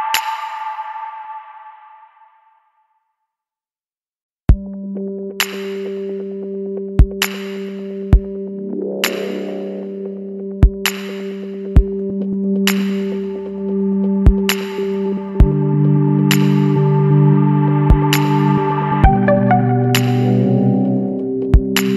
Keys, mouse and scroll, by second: 1.3 click, 2.8 click, 4.2 Escape, 5.0 click, 6.2 click, 7.6 KP_7, 8.6 KP_2, 13.6 click, 14.9 click, 17.8 click, 19.2 KP_2, 20.9 click.